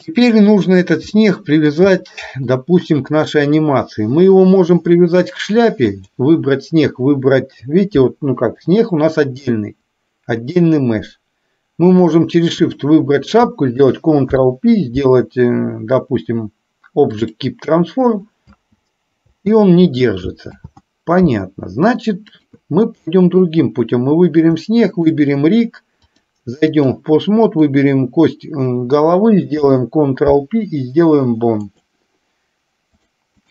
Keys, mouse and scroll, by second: 1.1-1.8 middle drag, 2.0-2.6 shift+middle drag, 6.0 shift+click, 12.4 shift+click, 14.3 ctrl+p, 18.5 space, 20.6 ctrl+z, 22.4 click, 24.9 shift+click, 26.0-27.0 drag, 27.4 click, 29.5 ctrl+p, 33.1 click.